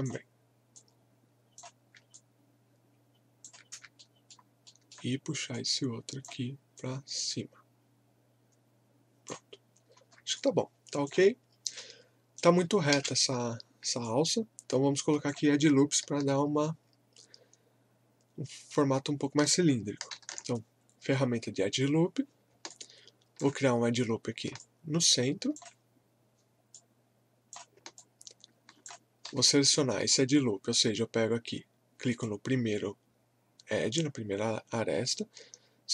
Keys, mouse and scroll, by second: 2.1-4.0 alt+drag, 4.0 alt+middle click, 5.6-10.0 drag, 10.0 scroll down 1, 10.3 alt+click, 11.7 right click, 12.9 space, 13.6 scroll down 1, 14.0-20.2 alt+drag, 20.2 ctrl+r, 22.7-24.6 alt+drag, 24.6-29.3 alt+drag, 29.3 w, 30.7-31.1 scroll up 1, 32.1 click.